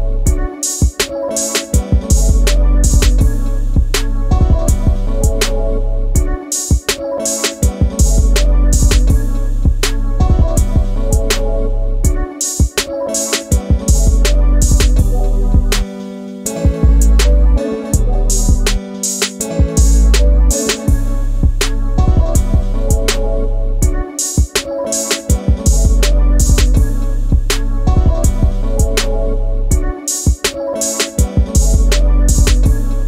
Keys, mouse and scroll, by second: 3.2-5.1 drag, 5.1 KP_Decimal, 6.0 middle click, 6.4-7.0 scroll down 2, 7.0-8.7 middle drag, 8.7 r, 10.7-11.3 scroll down 10, 11.3 KP_0, 13.1 r, 16.0 click, 16.5 drag, 19.5 g, 24.5 click, 24.8-25.2 scroll down 2, 25.2 middle click, 25.4 scroll up 1, 25.6-26.5 scroll down 6, 26.5 click, 27.7 KP_0, 28.3-28.9 scroll up 1, 28.9 g, 30.3 g.